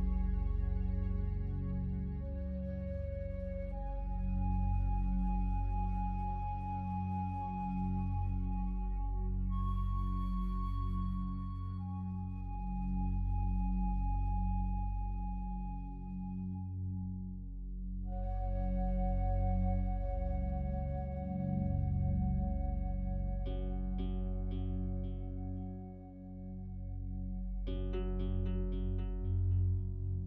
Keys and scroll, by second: 1.2 ctrl+z, 6.7 ctrl+z, 12.6 ctrl+z, 28.0 ctrl+z.